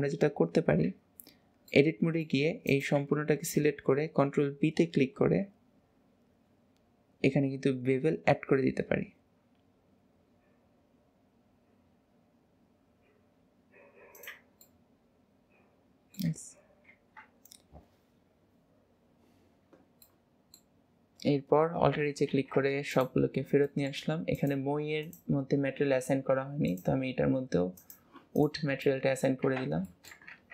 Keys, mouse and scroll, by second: 1.8 middle click, 2.7 click, 14.7-17.0 middle drag, 17.0 ctrl+s, 17.6-19.1 scroll down 2, 20.1-21.1 middle drag, 21.1 scroll down 1, 22.3 alt+h, 23.0 click, 23.3 scroll down 2, 23.8-24.5 shift+middle drag, 24.5 click, 25.1 click, 26.7-28.5 drag, 28.9 middle click, 29.5 ctrl+s, 29.9 shift+middle click.